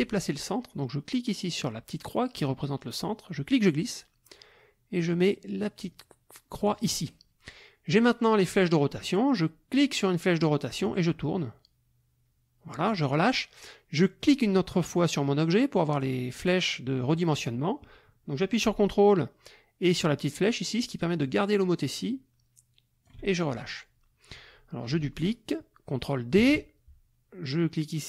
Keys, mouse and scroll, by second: 3.1-7.0 drag, 9.7-13.1 drag, 14.2 click, 20.5-23.2 ctrl+drag, 26.4 ctrl+d, 27.5-28.0 drag.